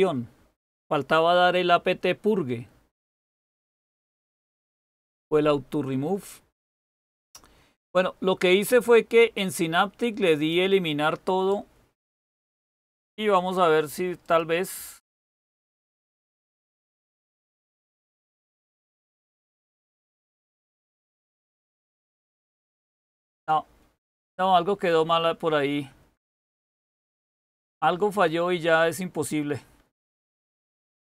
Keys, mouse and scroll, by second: 16.1-17.8 typing.